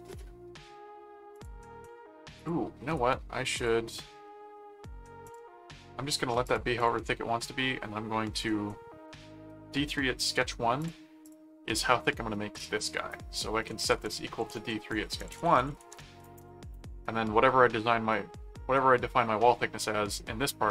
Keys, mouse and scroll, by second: 1.3 click, 2.4 click, 2.9 right click, 3.6 click, 5.3 click, 6.4 click, 10.8 click, 13.6-16.6 typing, 17.9 middle click.